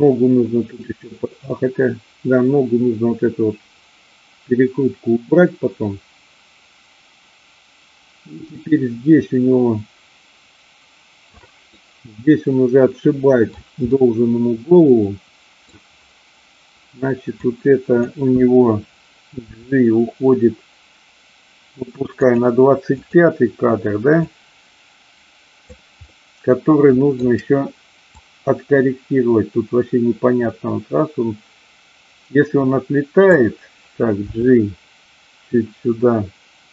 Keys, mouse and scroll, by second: 11.6-13.5 middle drag, 13.9-15.6 middle drag, 17.3 click, 19.4 g, 22.9 click, 24.2-25.8 drag, 26.0-27.2 middle drag, 28.2-33.3 drag, 34.3 g.